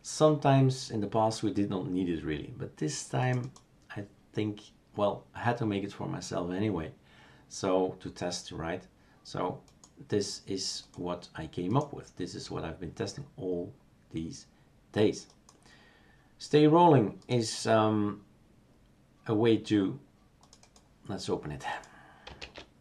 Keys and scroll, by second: 22.5 shift+super+q.